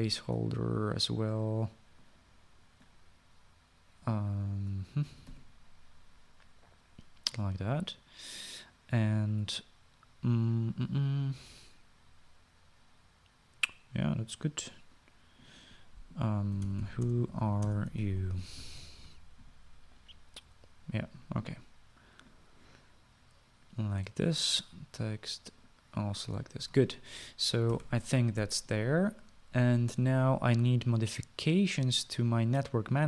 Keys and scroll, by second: 6.1 typing, 17.3-19.7 typing, 28.7 ctrl+s.